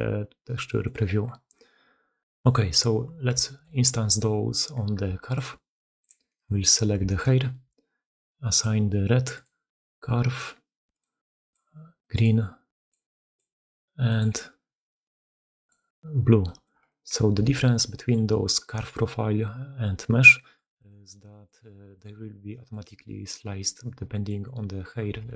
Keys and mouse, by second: 0.7 d, 0.8 d, 2.3 click, 3.3 shift+drag, 5.2-6.0 alt+drag, 6.1 click, 6.9 shift+click, 10.8 click, 12.8-15.6 drag, 16.3 drag, 16.7 shift+middle drag, 16.9 click, 17.4 alt+q, 17.8 click, 20.2 click, 20.7 shift+drag, 21.1 click, 22.4 click, 24.0 click, 25.1 alt+q.